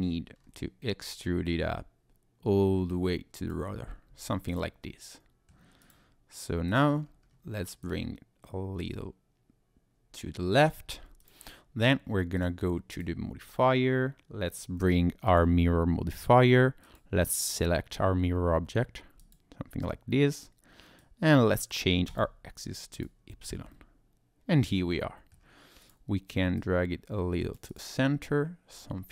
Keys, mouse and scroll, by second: 0.3-0.9 scroll down 2, 1.1 click, 4.1 Tab, 4.5 click, 4.8 middle click, 5.8 click, 6.7 click, 7.0-7.8 scroll up 2, 7.8 click, 10.9 scroll down 1, 11.2 click, 12.4 click, 12.9 click, 16.8 click, 21.0 click, 22.1 click, 22.9 click, 23.7 middle click, 25.8 click, 26.6 click, 27.7 click, 28.0 middle click.